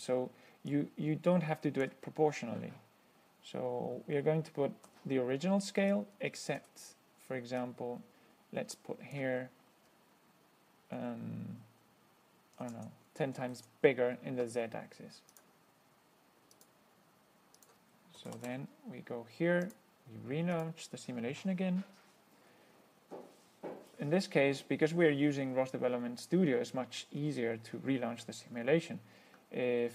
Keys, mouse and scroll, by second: 1.0-2.3 drag, 5.1 1, 6.2-6.9 drag, 6.8 1, 7.9-9.6 drag, 12.8 KP_1, 13.0 KP_0, 13.8 ctrl+s, 15.6 click, 16.8 click, 17.8 click, 18.2-19.2 typing, 19.9 click, 20.8 click.